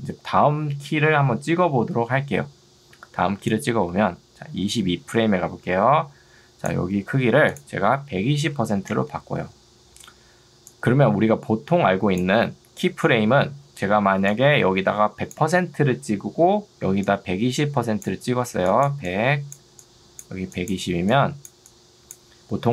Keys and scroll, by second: 8.3-9.2 typing, 13.9 ctrl+2.